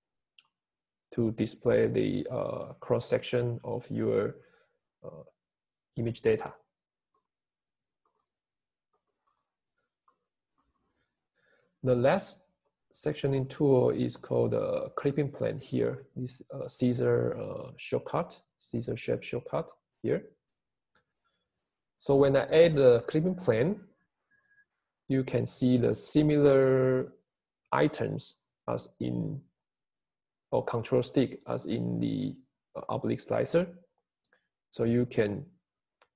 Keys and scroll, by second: 25.0 Home.